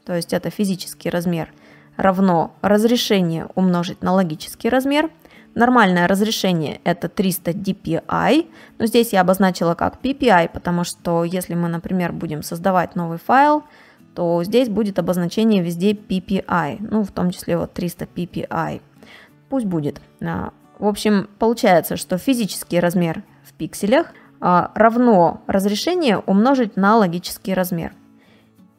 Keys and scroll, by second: 11.9 ctrl+n, 24.1 space, 26.6 space.